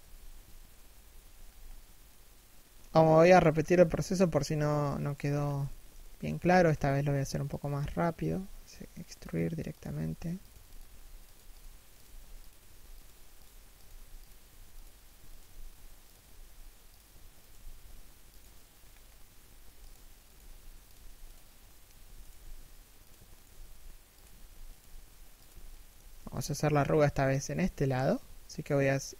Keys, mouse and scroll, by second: 1.0 scroll up 1, 1.6 middle click, 2.4 KP_3, 3.1 KP_1, 3.9 z, 4.6 alt+right click, 4.9-5.2 scroll down 1, 5.2 alt+shift+middle click, 5.9 e, 7.8 e, 13.4 r, 14.9 alt+right click, 15.1 g, 17.0 alt+right click, 17.1 g, 18.4 scroll up 1, 19.3 e, 21.5 a, 21.8 alt+right click, 22.0 g, 23.0 alt+right click, 23.1 g, 24.3 alt+right click, 24.5 g, 25.2 alt+shift+middle click, 25.7 g, 26.1 a.